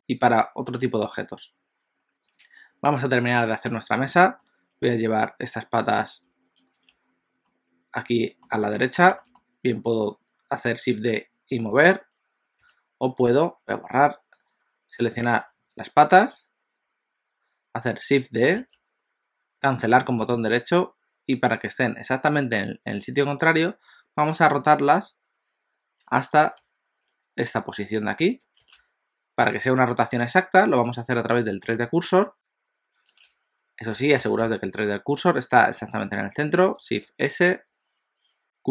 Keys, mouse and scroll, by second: 2.4 click, 3.3-3.6 scroll down 2, 3.6 middle click, 4.5 middle click, 6.6 shift+click, 7.5 middle click, 8.8 middle click, 9.1 shift+d, 12.6 x, 14.4 click, 15.7 shift+click, 18.7 shift+d, 37.0 shift+s, 37.6 shift+s.